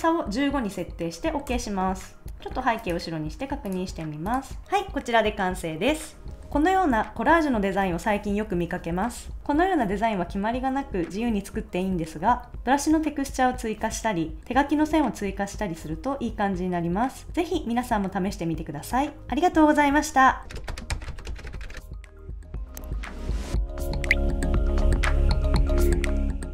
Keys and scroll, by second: 1.4 Return, 2.3 super+s.